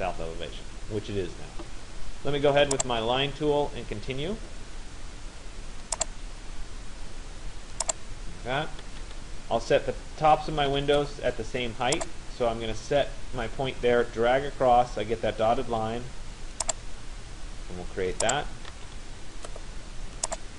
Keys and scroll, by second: 8.5 Return, 18.4 Return.